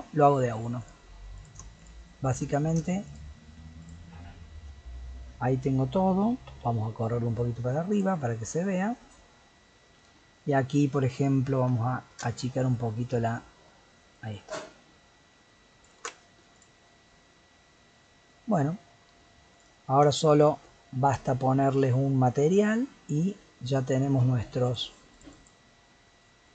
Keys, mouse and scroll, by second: 0.8 click, 1.3 click, 1.8 shift+click, 2.3 shift+click, 3.1 shift+click, 3.8 shift+click, 6.2 g, 8.2-11.3 middle drag, 12.1-15.1 alt+drag, 16.5 click, 16.8-18.4 middle drag, 18.4 scroll down 1, 18.7-19.5 middle drag, 19.5 click, 20.2 shift+click, 20.4 shift+click, 23.2-26.5 drag.